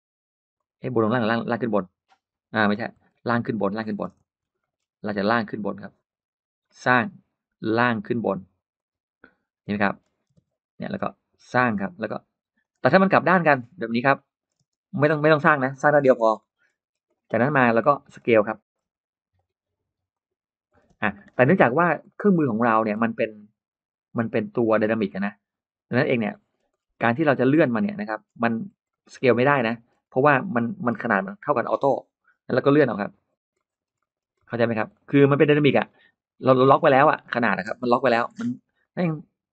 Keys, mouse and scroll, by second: 0.4 click, 1.5 click, 3.0 ctrl+z, 3.6 middle click, 4.1 ctrl+z, 4.4 middle click, 6.5 click, 7.5 click, 8.6 click, 9.5 middle click, 10.2 space, 10.5 middle click, 11.3 click, 11.6 middle click, 12.4 click, 13.3 click, 13.9-14.2 scroll up 1, 14.0 middle click, 14.3 scroll down 1, 14.4 space, 14.9 click, 15.9 Delete, 15.9-17.2 scroll up 3, 16.2 middle click, 17.1 middle click, 17.3 scroll down 1, 17.6 click, 17.9-18.6 scroll up 3, 18.7 s, 19.2 click, 20.0 click, 20.5 scroll down 2, 20.8 space, 21.0 middle click, 21.5 scroll down 1, 21.9-22.2 scroll up 1, 21.9 middle click, 22.7-23.0 scroll down 1, 23.1-23.5 scroll up 2, 23.2 middle click, 23.9 scroll down 2, 24.4-25.0 scroll up 2, 25.0 middle click, 25.9-27.4 scroll down 5, 26.1 middle click, 26.9 middle click, 27.5 scroll up 1, 27.8 middle click, 28.0 scroll down 2, 28.4-29.4 scroll up 5, 28.7 middle click, 29.3 middle click, 29.9 scroll up 1, 31.2 click, 32.9 click, 33.1-34.0 scroll up 2, 33.4 middle click, 33.8 middle click, 34.0-35.3 scroll down 6, 34.2 middle click, 34.7 middle click, 35.3 space, 35.4 scroll up 2, 35.7 space, 35.8 middle click, 36.7-37.4 scroll down 2, 37.2 middle click, 37.6 click, 37.9-38.7 scroll up 2, 38.6 middle click, 38.8-39.1 scroll down 1.